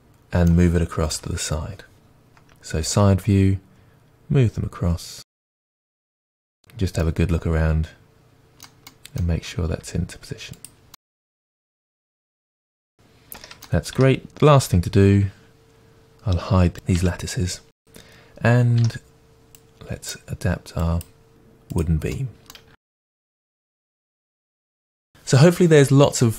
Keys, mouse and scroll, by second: 1.1 KP_3, 2.9 g, 6.6-7.0 scroll up 2, 9.7 g, 11.6 g, 14.0 Tab, 16.8 click, 18.0 Tab, 18.6 alt+click, 18.7 middle click, 19.0 g, 19.5 alt+click, 19.6 g, 19.8 middle click, 20.0 alt+click, 20.2 middle click, 20.2 g, 20.5 click, 20.6 g, 20.8-22.2 middle drag, 22.2 click, 22.7 Tab, 23.0 middle click, 23.2 g, 24.1 Tab, 24.2 scroll down 1, 24.8 Tab, 24.8 middle drag, 24.8 scroll down 1.